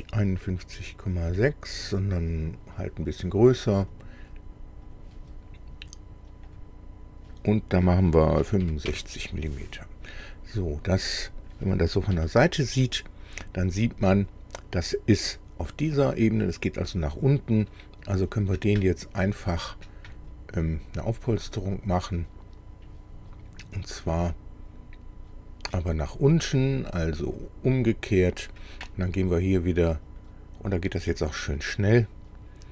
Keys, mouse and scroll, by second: 1.3 Delete, 2.3-4.1 drag, 4.9 click, 6.5 click, 8.4 KP_6, 8.6 KP_5, 8.9 KP_Enter, 9.7-10.0 scroll down 1, 10.2-11.6 drag, 12.1 KP_1, 13.4-13.8 scroll up 1, 17.7 click, 19.4 click, 21.4 click, 24.0-25.9 middle drag, 27.4 click, 30.1 click, 30.6 click, 31.1 click, 31.6 click.